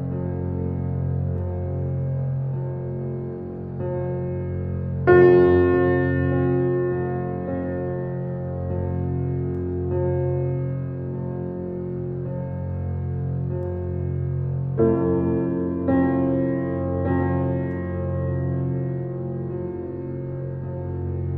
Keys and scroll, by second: 2.4 u, 16.9 4, 17.4 0, 17.8 Return.